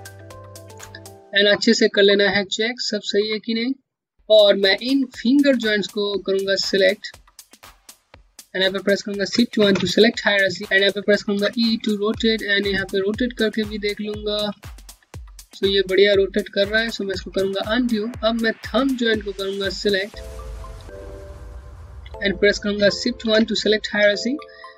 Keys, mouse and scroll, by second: 0.3 alt+click, 1.4 scroll up 1, 1.7 alt+middle click, 3.2 scroll up 1, 3.7 scroll down 1, 4.2-4.5 scroll up 1, 4.7 alt+middle click, 6.7 shift+click, 7.2 shift+click, 7.7 shift+click, 9.3 shift+1, 10.2-10.6 scroll down 1, 10.6-11.0 typing, 12.3 click, 14.3 alt+click, 17.2 alt+click, 20.0 scroll down 1, 20.5 alt+click, 21.3 alt+middle click, 23.7 scroll up 1, 24.2 alt+click.